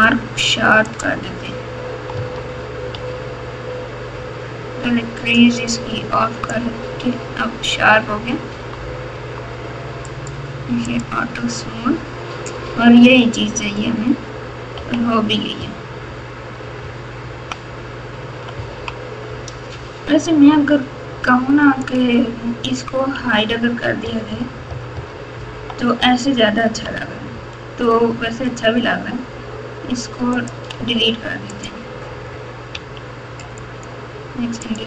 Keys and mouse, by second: 2.1 Tab, 2.9 Tab, 5.7 click, 7.7 Tab, 8.5 Tab, 9.1 Tab, 10.2 right click, 14.7-17.4 typing, 18.5 KP_6, 18.8 KP_6, 21.8 click, 23.1-24.9 typing, 26.0 KP_4, 26.6 KP_6, 30.3 click, 31.5 click, 32.7 x, 34.6 click.